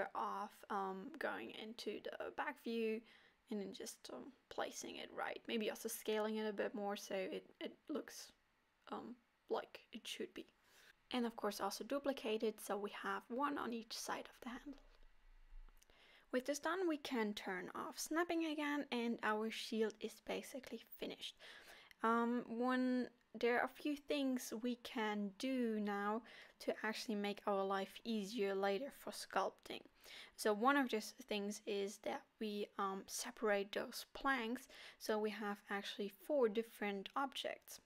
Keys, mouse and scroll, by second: 0.7 g, 2.4 click, 3.3 g, 7.2 shift+d, 11.0 s, 11.5 s, 12.1 g, 13.1 alt+a, 13.4 l, 13.7 s, 14.0 middle click, 15.0 scroll up 4, 15.3 middle click, 17.6 click, 17.9 scroll down 3, 18.2 middle click, 18.7 middle click, 19.1 Tab, 19.4 scroll down 2, 19.7 middle click, 20.2 click, 20.6 middle click, 22.1 click, 22.7 click, 27.1 scroll up 3, 27.4 middle click, 28.3-28.8 scroll down 2, 28.5 middle click, 31.9 click.